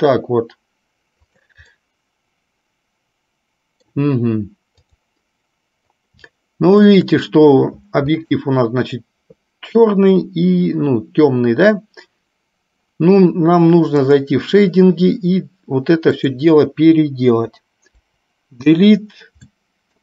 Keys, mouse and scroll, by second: 2.0-7.1 middle drag.